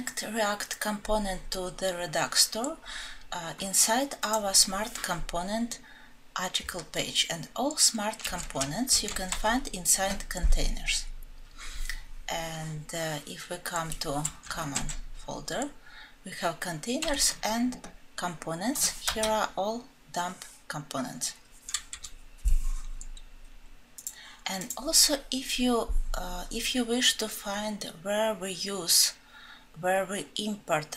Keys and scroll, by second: 8.3 alt+Home.